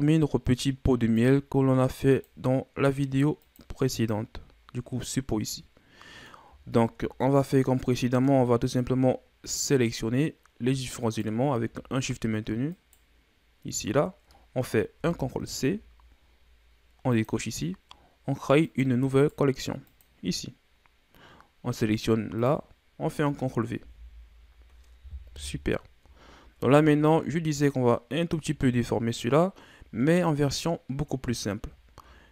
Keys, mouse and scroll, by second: 1.1 click, 2.1 click, 3.4 click, 3.9 click, 5.0-5.5 scroll down 1, 5.5-6.6 middle drag, 6.6 shift+scroll up 2, 7.2-10.2 middle drag, 11.0 right click, 12.7 shift+right click, 14.9 ctrl+c, 17.1 click, 18.6 click, 19.1 right click, 20.0-22.1 right drag, 22.4 click, 23.8 ctrl+v, 25.3 KP_1, 26.3 shift+scroll up 5, 26.7 a, 29.3 shift+scroll up 2, 30.1-31.1 scroll up 4, 31.8-32.3 shift+scroll up 1.